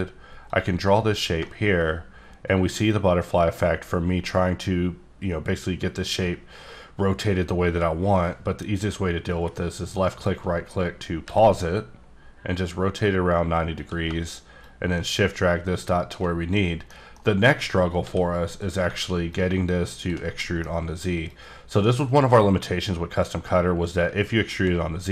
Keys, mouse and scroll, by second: 0.5 click, 9.9 shift+right click, 13.8-16.2 drag, 16.8 middle click, 17.1 middle click, 17.5-17.9 scroll up 2, 18.0 s, 18.5 click, 20.4 middle click, 21.3 click.